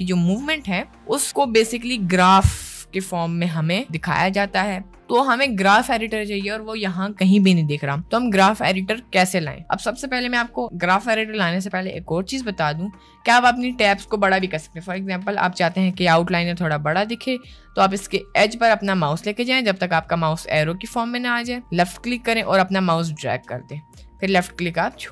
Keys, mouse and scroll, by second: 21.6-25.1 drag.